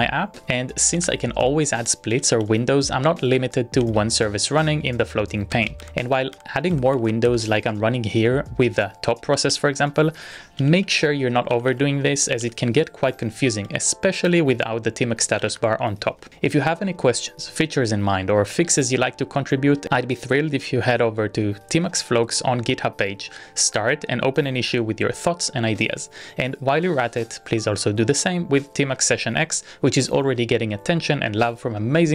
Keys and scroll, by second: 1.0 ctrl+a, 1.2 p, 2.2 ctrl+a, 2.4 s, 5.8 ctrl+u, 6.4 ctrl+u, 6.8-7.7 typing, 9.4 ctrl+a, 9.5 ctrl+a, 10.6 ctrl+a, 13.8 ctrl+c, 14.4 ctrl+d, 15.4 ctrl+a, 15.8 p.